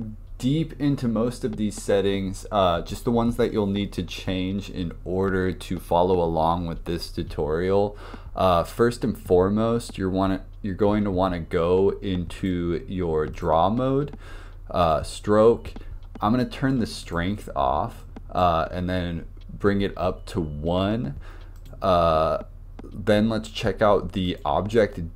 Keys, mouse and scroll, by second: 12.4-15.3 drag, 17.1-21.1 drag, 21.6-22.4 drag, 24.3-25.1 drag.